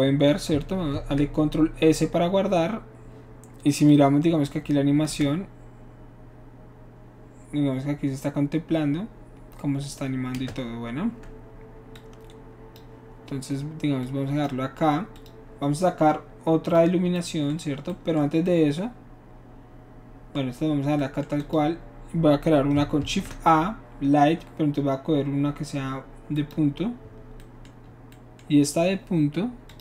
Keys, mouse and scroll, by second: 0.9 ctrl+s, 3.9-4.5 drag, 5.3 space, 10.4 space, 12.0-12.8 drag, 14.0-14.4 drag, 15.2 click, 16.7 click, 21.4 click, 23.0 shift+a, 26.4 click, 29.7 click.